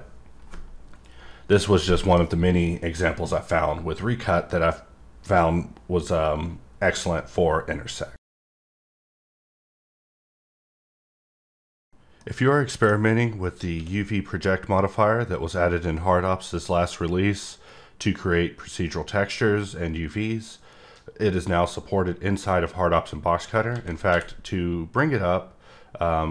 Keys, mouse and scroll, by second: 1.6 middle click, 2.3-3.4 scroll up 1, 21.5 middle click, 23.5 click.